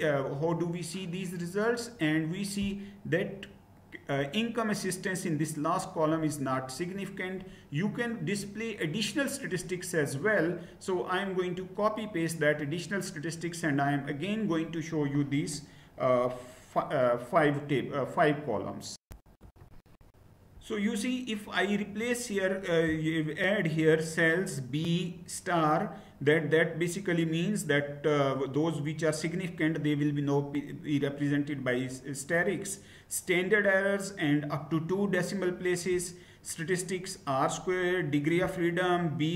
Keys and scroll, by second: 19.0 ctrl+v, 19.0 Return, 19.0 shift+F9, 19.0 /.